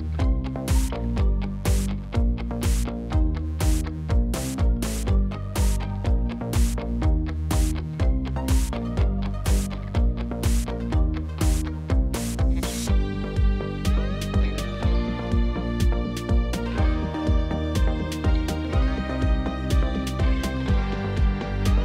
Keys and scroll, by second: 1.3 s, 2.5 e, 5.1 s, 5.6 e, 8.7 2, 9.3 ctrl+b, 12.2 g, 12.3 z, 13.8 ctrl+r, 15.4 g, 15.5 z, 16.5 ctrl+b, 19.0 g, 19.1 z.